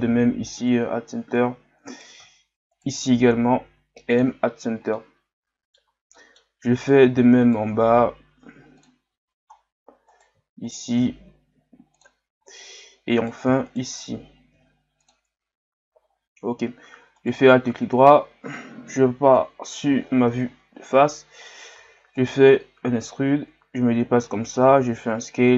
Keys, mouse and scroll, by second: 0.0 m, 1.0-1.5 scroll up 2, 1.9 right click, 2.8 shift+right click, 4.6 scroll down 1, 5.0-6.8 middle drag, 6.8 right click, 7.4 shift+right click, 9.2-9.5 scroll down 2, 10.1 right click, 10.6 shift+right click, 12.4-13.2 scroll down 1, 13.2 right click, 13.6 shift+right click, 14.5 m, 15.9-17.2 scroll down 2, 17.2 alt+right click, 17.6-19.4 middle drag, 19.4 KP_1, 20.5-21.4 scroll down 2, 21.8 e, 23.0-24.6 drag, 24.6 s.